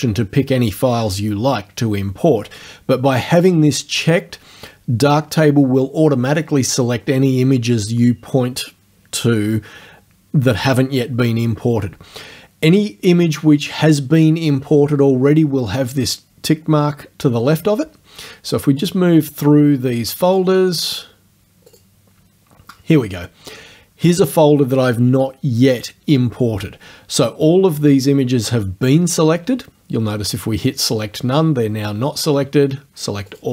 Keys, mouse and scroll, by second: 18.8 click, 20.3 click, 21.7 click, 30.9 click, 33.3 click.